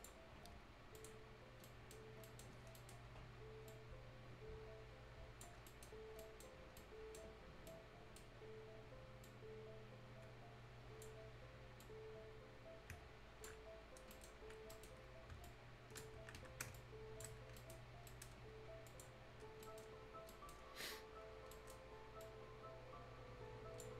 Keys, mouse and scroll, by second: 0.2 scroll up 1, 1.0 click, 1.4 scroll up 1, 1.6 right click, 2.0-2.8 scroll up 2, 2.2 right click, 2.8 right click, 3.3 right click, 3.9-5.7 drag, 5.7 right click, 5.9 scroll down 1, 6.2 right click, 6.8 right click, 7.6 scroll up 1, 7.7-9.2 right drag, 9.2-11.8 drag, 11.8-13.7 drag, 13.7 scroll down 1, 14.0 scroll up 1, 14.1 right click, 14.3 scroll down 1, 14.7 right click, 15.0 scroll up 1, 15.4 ctrl+click, 16.2 shift+Escape, 16.7 click, 17.6 shift+right click, 17.9 shift+scroll down 1, 18.1 shift+right click, 18.9 shift+click, 19.2 shift+scroll down 1, 19.5-20.2 scroll up 3, 19.6 shift+right click, 20.3 shift+right click, 20.6 shift+scroll up 1, 21.3 shift+scroll down 1, 21.5 shift+right click, 22.2-23.9 shift+drag.